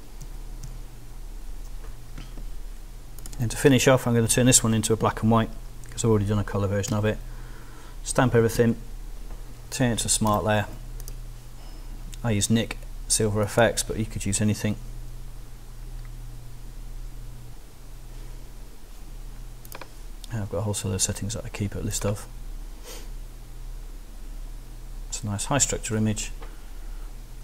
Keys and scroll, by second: 6.9 alt+shift+super+e, 8.6 ctrl+alt+shift+super+s.